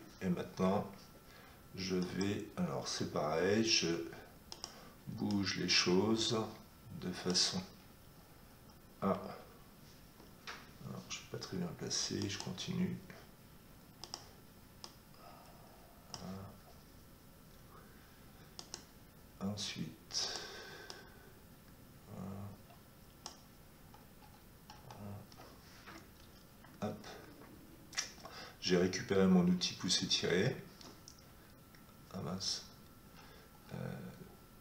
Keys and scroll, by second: 26.6 Escape, 30.6 Escape.